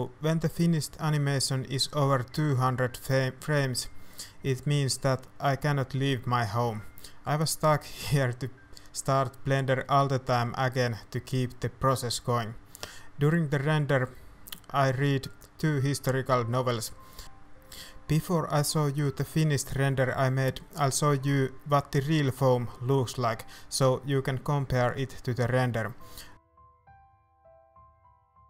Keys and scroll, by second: 0.0-0.5 typing, 0.5 Return, 0.7 ctrl+s, 1.1 F12, 1.9 F11, 3.2 h, 4.6 BackSpace, 4.6 BackSpace, 4.7 KP_0, 4.9 Return, 4.9 KP_8, 5.2 ctrl+shift+F12, 5.9 F11, 7.2 shift+z, 7.4 alt+h, 7.5 a, 7.6 ctrl+s, 7.9 shift+z, 9.1-10.7 typing, 9.2 ctrl+s, 14.3 shift+z, 15.4 ctrl+alt+shift+KP_0, 15.6 shift+f, 15.9 s, 16.2 shift+a, 18.9 ctrl+s, 19.0-19.6 typing, 19.5 Tab, 21.4 ctrl+s, 21.4-25.6 typing, 24.8 ctrl+s, 26.0 ctrl+s, 27.2 shift+z, 27.4 Tab, 27.6 shift+a, 27.8 ctrl+r, 28.0 ctrl+r, 28.1 Tab.